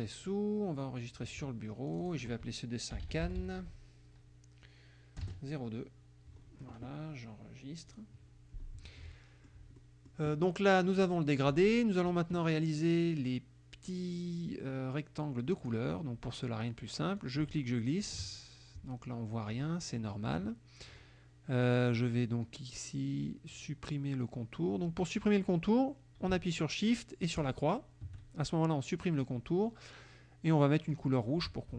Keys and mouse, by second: 1.9 click, 2.7-4.1 typing, 5.2 KP_0, 5.3 KP_2, 7.9 click, 9.0 middle click, 9.8 middle click, 11.0 click, 15.6 click, 17.2 ctrl+click, 27.4 shift+click, 30.9 click.